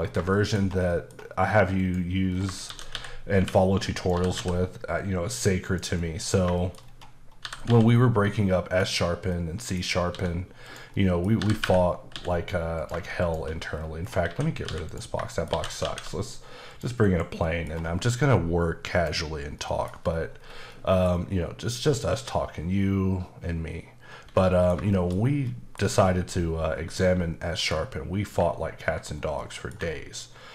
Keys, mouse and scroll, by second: 0.0 scroll down 3, 0.3 shift+middle click, 0.7 scroll up 1, 0.9 middle click, 1.8 click, 2.3 scroll down 2, 2.7-4.3 typing, 4.0 click, 5.6 click, 6.0 middle click, 6.5 shift+middle click, 6.8-7.4 scroll up 4, 7.4-7.7 typing, 8.7 click, 9.3 middle click, 10.1 s, 10.6 click, 10.9 middle click, 11.4-12.1 typing, 12.7 click, 13.2 shift+click, 13.7-14.3 scroll down 4, 14.3-17.0 typing, 15.3 shift+middle click, 16.7 click, 17.4 middle click, 18.9 click, 19.6 middle click, 20.0-20.4 scroll up 2, 20.4-20.7 scroll down 1, 20.7 middle click, 24.4 middle click, 24.9 shift+middle click, 27.7 click, 29.0-29.4 scroll down 1, 29.4 middle click.